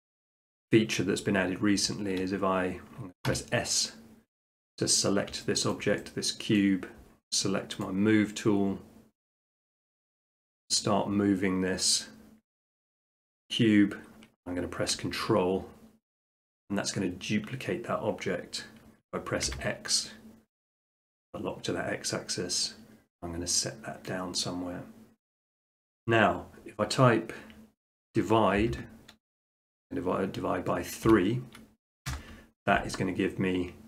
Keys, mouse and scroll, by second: 0.0 middle click, 1.0 middle click, 3.3 s, 4.7 click, 5.7 shift+middle click, 6.6 middle click, 7.8 click, 10.0 click, 10.9 click, 14.9-16.0 drag, 19.5 x, 24.4-25.4 drag, 28.6 /, 31.1 3, 32.1 Return.